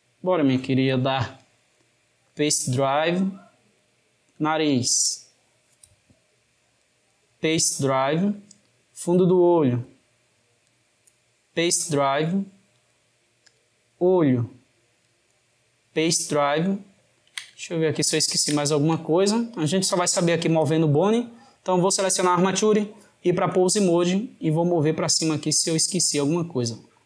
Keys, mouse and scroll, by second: 1.1-4.2 right drag, 4.2 click, 4.9 click, 6.6-8.8 right drag, 8.8 click, 10.4-13.3 right drag, 13.3 click, 14.8-16.7 right drag, 16.7-20.3 ctrl+middle drag, 20.3 click, 21.7-24.4 drag.